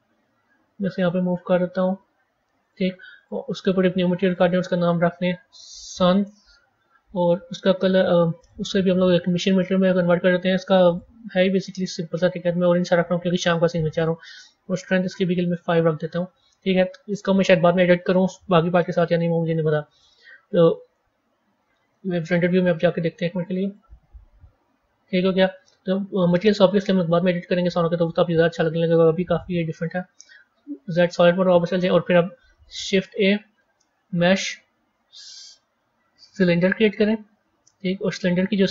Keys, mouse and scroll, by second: 3.1-7.3 drag, 8.3-10.9 drag, 13.9-16.9 drag, 18.7-21.4 middle drag, 21.4 a, 22.8 z, 25.3-27.7 middle drag, 27.7-28.7 scroll up 3, 29.3-30.4 middle drag, 30.4 z, 32.7 shift+a, 38.0 click.